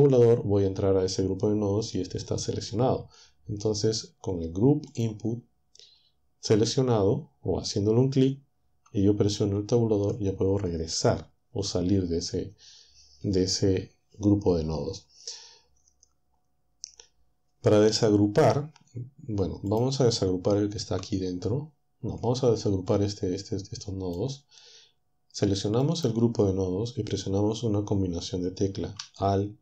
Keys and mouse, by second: 5.0-9.9 drag, 9.9 Tab, 19.7-20.8 drag, 20.8 Tab, 22.1 Tab, 22.9-24.1 drag, 25.9-29.0 drag.